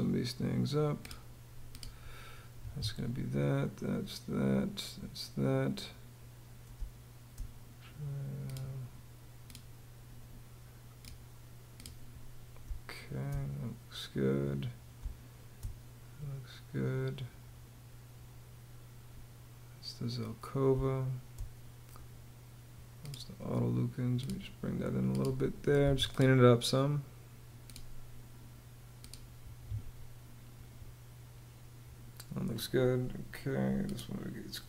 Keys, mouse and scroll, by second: 2.1 Escape, 3.0 Home, 6.3 space, 12.3 space, 14.5 space, 20.2 space, 25.4 Escape, 29.0 Escape.